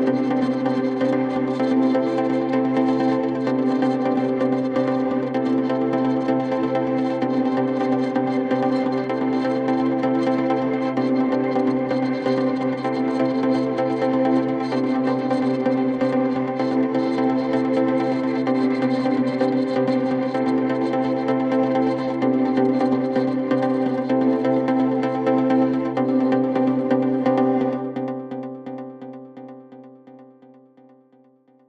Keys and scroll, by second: 14.5 ctrl+z.